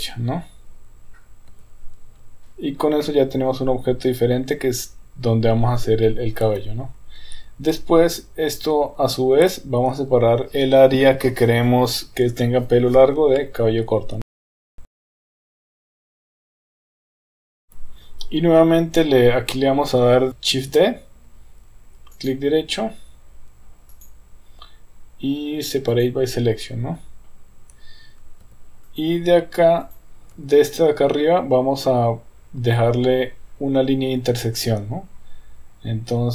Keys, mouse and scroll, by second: 1.9 Tab, 3.0-5.8 middle drag, 6.5 KP_1, 8.2 Tab, 9.4 KP_3, 15.5 shift+click, 15.9 middle click, 16.0 Tab, 16.0 click, 16.2 KP_3, 16.6 shift+click, 16.9 shift+click, 17.5 middle click, 17.6 KP_1, 17.7 KP_3, 20.5 shift+d, 23.9-27.2 right drag, 28.5 Tab, 29.0 click, 29.8 click, 30.4 Tab.